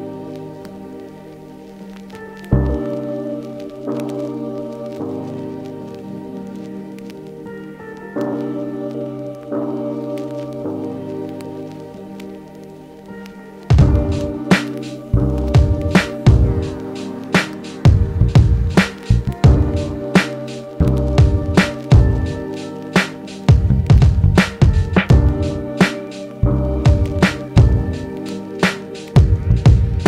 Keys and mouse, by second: 27.5-30.0 shift+drag.